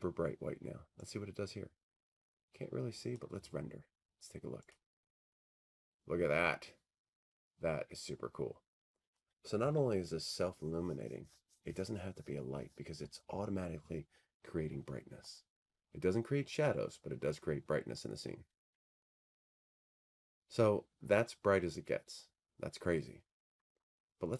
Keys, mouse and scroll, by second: 8.7 click, 10.4 click.